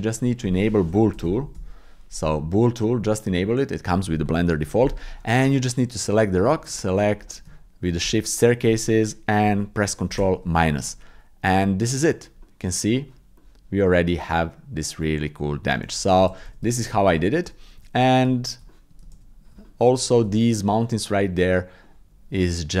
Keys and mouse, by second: 7.2 click, 10.9 ctrl+KP_Subtract, 12.4 middle click, 13.3 middle click, 14.3 middle click, 15.2 middle click, 16.5 ctrl+z, 16.8 ctrl+z, 17.0 ctrl+z, 17.2 ctrl+z, 17.6 ctrl+z, 17.9 ctrl+z, 18.3 middle click, 18.7 shift+middle click, 19.3 ctrl+z, 19.6 middle click, 20.3 shift+middle click, 21.2 click, 21.8 click.